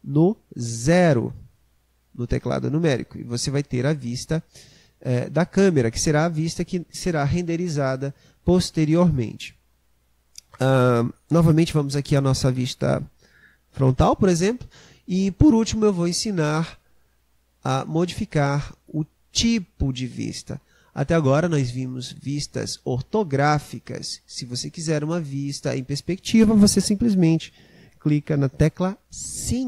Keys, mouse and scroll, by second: 0.1 KP_0, 10.2-13.2 middle drag, 14.2 KP_1.